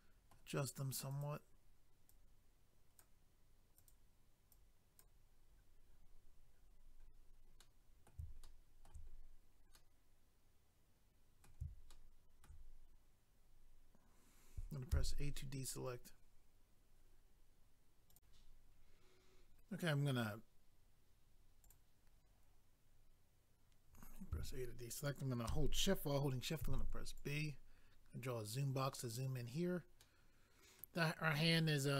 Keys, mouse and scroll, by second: 1.1 click, 1.3 click, 2.1 click, 3.8 click, 3.9 click, 4.5 click, 5.6 scroll down 1, 8.4 shift+middle click, 9.1-9.5 scroll down 1, 9.7 middle click, 11.9 shift+middle click, 12.9 scroll up 1, 14.9 a, 18.1 click, 18.2 click, 21.7 click, 21.9 click, 27.2 click, 28.9 scroll down 1, 30.0 middle click.